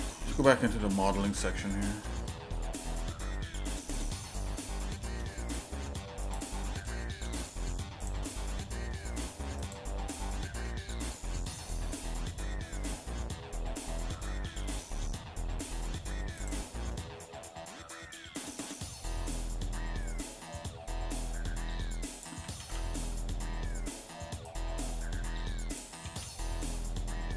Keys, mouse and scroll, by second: 0.0 click, 0.6 middle click, 1.4 shift+middle click, 2.2 scroll up 1, 2.9-5.1 shift+middle drag, 5.3 middle click, 6.2 click, 6.6 shift+middle click, 8.0 shift+click, 8.4 middle click, 9.6 shift+click, 10.2 shift+middle click, 14.6 middle click, 15.1 scroll up 1, 16.4 click, 20.7-22.4 drag, 22.5 ctrl+z, 24.4-25.8 drag, 26.0 ctrl+z.